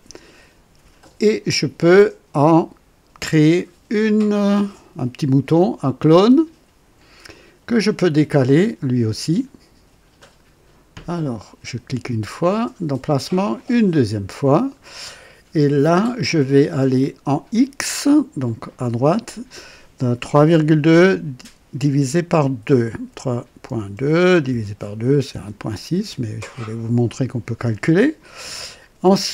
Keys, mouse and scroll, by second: 5.8 click, 10.1 click, 13.5 click, 16.9 click, 23.0 KP_3, 23.6 KP_Decimal, 23.9 KP_2, 24.4 KP_Divide, 25.3 KP_2.